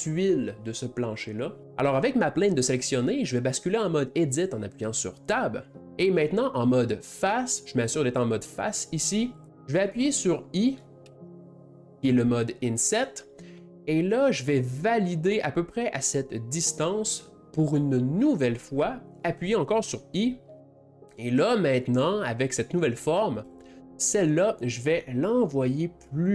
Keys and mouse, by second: 9.1 click, 9.5-11.1 middle drag.